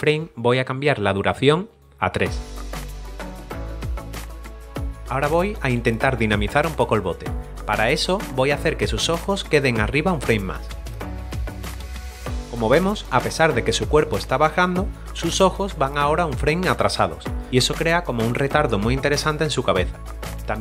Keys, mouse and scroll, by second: 0.9 click, 2.3 3, 3.7 click, 5.8 middle click, 7.3 scroll up 1, 8.2 middle click, 9.7 click, 11.1 right click, 11.2 click, 11.4 right click, 11.5 click, 11.7 right click, 11.7 click, 12.1 middle click, 12.9 typing, 13.0 click.